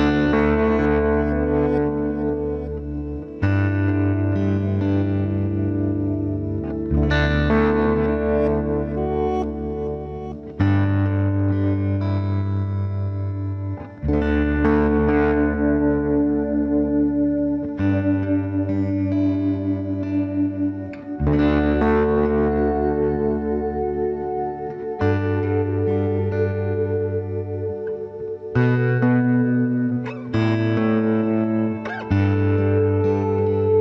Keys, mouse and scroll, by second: 0.0 right click, 1.2 click, 2.8-3.9 right drag, 3.3 click, 3.8 b, 4.2 g, 4.6 click, 5.6-7.4 right drag, 5.9 b, 6.3 g, 7.8 right click, 7.9 b, 8.4 g, 10.0 b, 10.4 g, 11.1 right click, 11.9-13.0 right drag, 12.1 b, 12.8 g, 13.0 click, 15.0 middle click, 15.9 ctrl+s, 17.1-19.0 right drag, 17.4 b, 17.8 g, 19.6-21.4 right drag, 19.8 b, 20.2 g, 22.7 right click, 22.9 b, 23.2 g, 24.8 b, 25.2 g, 28.9-30.5 right drag, 29.1 b, 29.5 g, 31.4-33.0 right drag, 31.6 b, 32.0 g, 33.6 b.